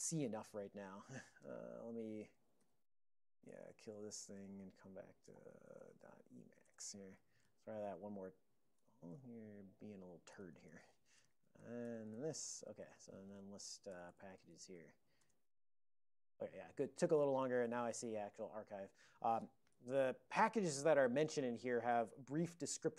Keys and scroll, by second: 1.2 ctrl+s, 1.5 Return, 2.4 ctrl+x, 2.7 k, 3.5 Return, 4.2-6.7 typing, 5.4 ctrl+g, 5.5 ctrl+x, 9.9 ctrl+p, 10.8 ctrl+p, 11.1 Tab, 13.1 ctrl+e, 13.3 a, 14.6 alt+x, 14.8-15.2 typing, 18.8 super+m.